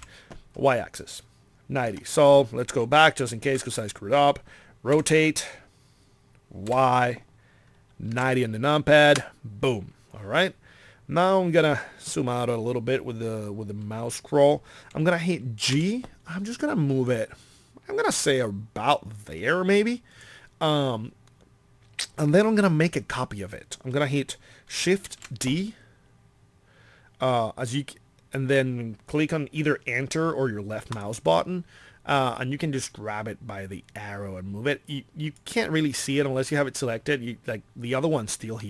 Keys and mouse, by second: 3.5 ctrl+z, 5.0 r, 15.7 g, 20.2-25.1 drag, 25.1 shift+d, 38.5-38.6 middle drag.